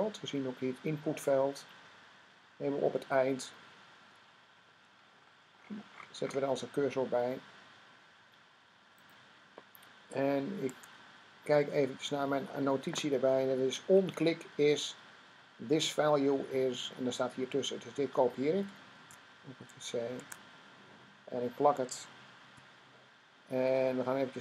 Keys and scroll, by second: 10.5 Tab, 18.8 c, 20.0 Tab, 22.2 v.